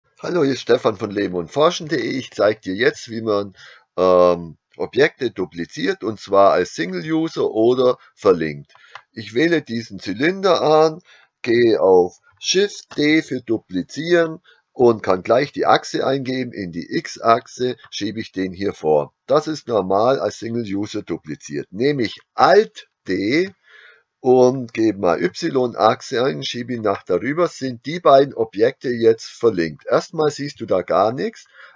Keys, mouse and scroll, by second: 0.1 alt+b, 8.8 click, 13.6 shift+d, 17.9 click, 19.5 click, 23.1 alt+d, 27.0 click.